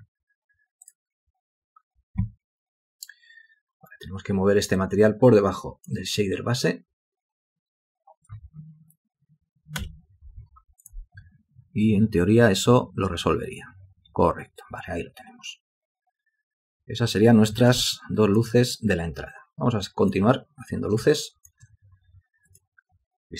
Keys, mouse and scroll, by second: 10.0 F8, 18.2 ctrl+alt+click, 21.4 alt+shift+click.